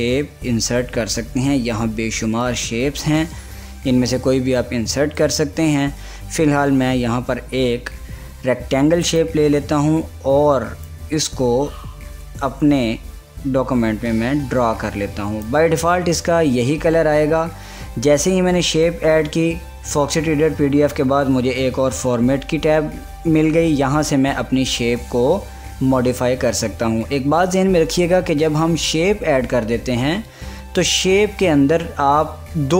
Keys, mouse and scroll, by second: 1.5 click, 9.2-17.8 drag, 31.0 click.